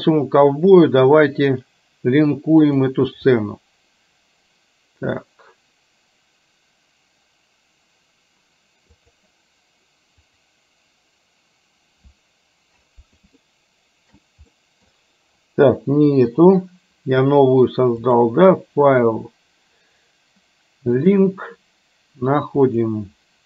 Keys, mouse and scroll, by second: 0.0-3.1 drag, 13.5-14.1 shift+middle drag, 14.6 middle click, 18.0-21.4 drag.